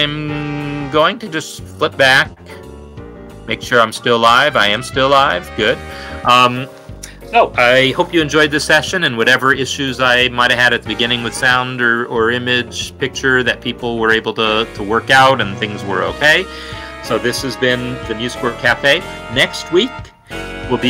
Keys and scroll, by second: 6.1 super+].